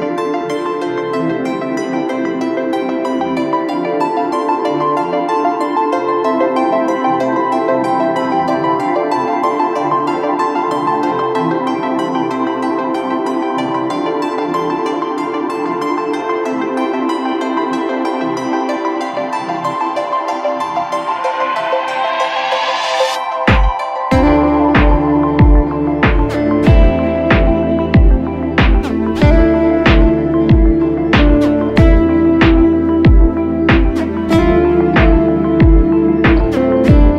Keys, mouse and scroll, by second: 6.3 ctrl+t, 13.2 right click, 15.7 ctrl+t, 20.8 shift+click, 31.7 Right, 34.5 ctrl+t.